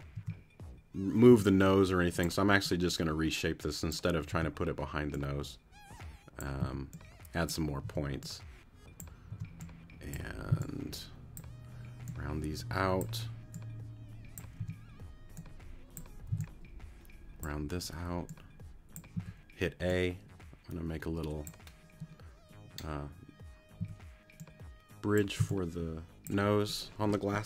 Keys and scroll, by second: 0.1 t, 1.3 t, 4.3 t, 6.6 a, 7.8 t, 9.3 t, 10.5 c, 14.6 t, 16.3 c, 19.1 a, 23.8 a, 25.4 c.